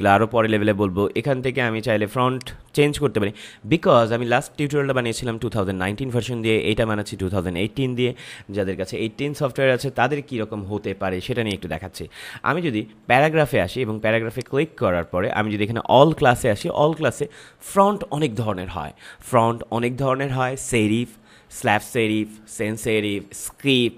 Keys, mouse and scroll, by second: 2.3 click, 11.4 click, 14.3 click.